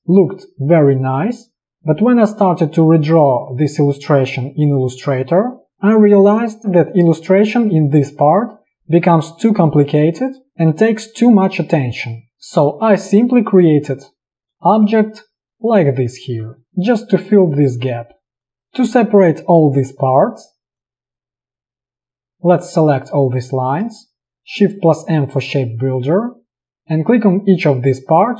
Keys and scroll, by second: 12.2 p, 16.7 v, 24.0 space, 25.2 shift+m.